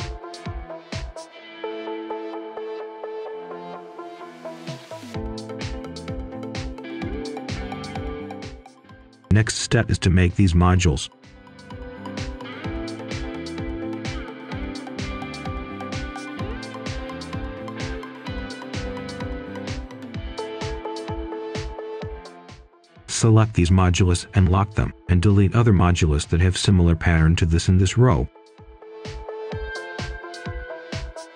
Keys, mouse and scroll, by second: 0.3-0.8 scroll down 1, 0.8 scroll up 1, 1.1 right click, 2.2 scroll down 1, 2.4-2.8 scroll up 1, 2.8 right click, 3.7 ctrl+right click, 5.0-6.9 shift+right drag, 7.9 scroll down 1, 8.6 scroll up 1, 9.6-11.1 right drag, 12.2-13.7 ctrl+right drag, 13.7 scroll up 1, 15.3 click, 18.2 right click, 19.0-19.9 scroll up 1, 19.9 click, 21.0 shift+click, 21.7 shift+click, 22.2 shift+click, 22.9-24.3 typing, 26.1-26.4 scroll down 1, 26.4 right click, 27.1 shift+click, 27.6 shift+click, 28.4 shift+click, 28.7 shift+click, 29.0 shift+click, 29.3 right click, 30.0 shift+click, 30.5 shift+click, 30.6 shift+click, 30.8 shift+click, 31.0 right click, 31.3 shift+click.